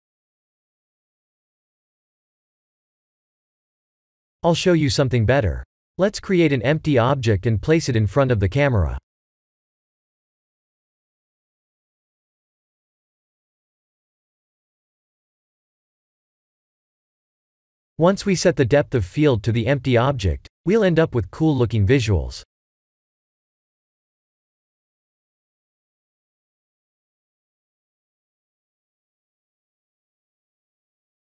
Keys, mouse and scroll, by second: 1.1 scroll down 3, 2.6 scroll down 2, 4.7 shift+a, 11.0 middle click, 11.4-12.0 middle drag, 12.2-14.3 scroll down 5, 14.3 g, 14.8 y, 15.6 x, 16.6 click, 17.0 KP_0, 18.3 g, 18.7 x, 19.1 y, 21.4 click, 21.6 g, 21.8 z, 23.4 click, 26.6 click, 28.8 click, 29.4 click, 30.0 click, 30.5 click.